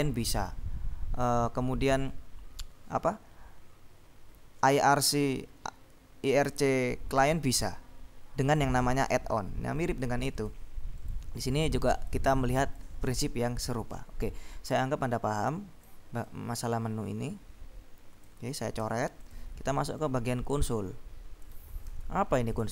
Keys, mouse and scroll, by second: 10.5-11.7 drag, 12.0-13.4 drag, 14.9-16.4 drag, 18.9 ctrl+s, 19.3 ctrl+click, 21.5 ctrl+click, 22.1 ctrl+b, 22.6 click.